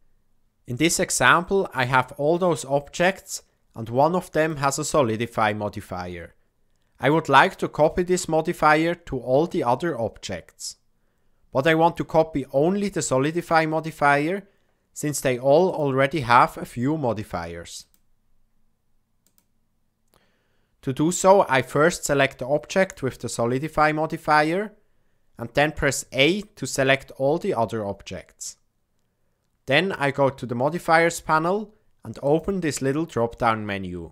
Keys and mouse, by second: 17.8-19.3 drag, 26.6 a, 32.2-34.1 drag.